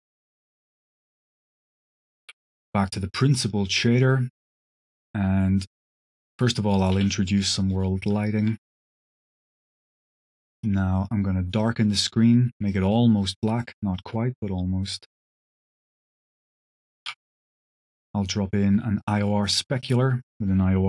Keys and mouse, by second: 0.6 click, 1.1 click, 1.7 click, 2.1 g, 3.3 click, 3.6 click, 4.2 click, 6.7 click, 7.4 middle click, 9.1-9.6 drag, 10.0 middle click, 10.8 middle click, 11.5 click, 12.6 click, 15.9 click, 16.4 click, 17.0 shift+a, 20.1-20.8 drag.